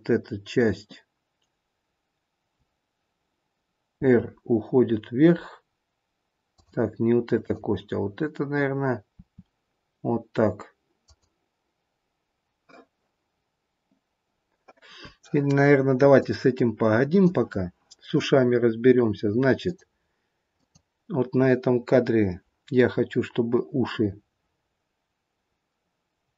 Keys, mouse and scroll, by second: 3.9 r, 7.4 click, 9.2 r, 16.1 click, 19.6 click, 21.9 click.